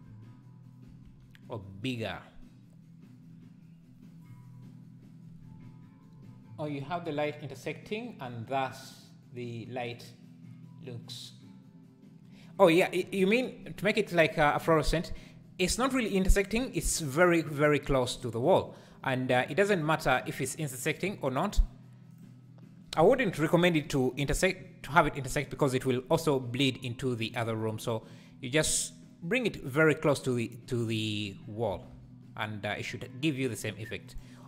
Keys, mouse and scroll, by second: 0.0 z, 20.9 click, 21.5 click, 22.1 click, 29.9 click, 31.7 g.